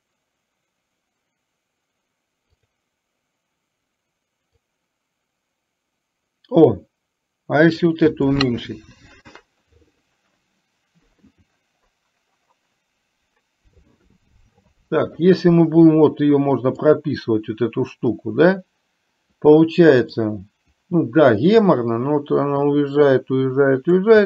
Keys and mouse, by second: 2.7 click, 4.8-7.9 drag, 21.8-23.9 drag.